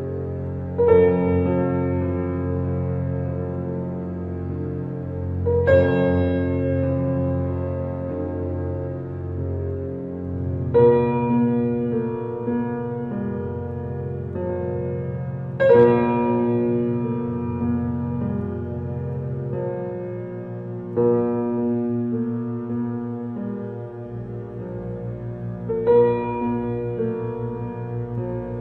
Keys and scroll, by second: 14.6 ctrl+u.